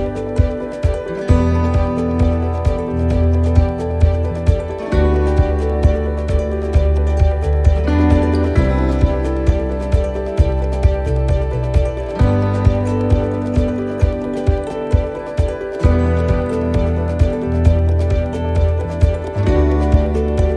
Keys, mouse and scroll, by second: 0.4-0.9 scroll down 6, 1.0 shift+middle click, 1.9-2.8 scroll up 4, 2.3 middle click, 4.6 middle click, 5.0-5.7 scroll down 5, 5.7 shift+middle click, 6.2-6.6 scroll up 4, 6.8-7.5 shift+scroll down 2, 7.5 shift+middle click, 7.9 scroll up 1, 8.9 right click, 10.2 l, 11.0 click.